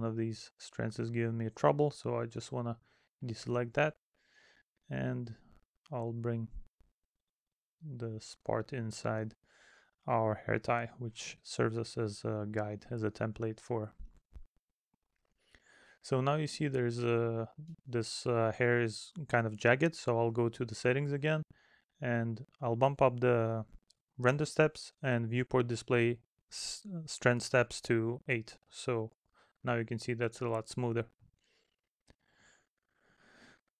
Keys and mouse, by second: 2.6 middle click, 4.3 middle click, 6.5 middle click, 7.2 middle click, 8.7 middle click, 10.3 middle click, 11.1 middle click, 12.0 middle click, 14.1 middle click, 17.1 middle click, 20.5 middle click, 21.7 middle click, 29.6 middle click, 31.1 middle click, 33.4 middle click.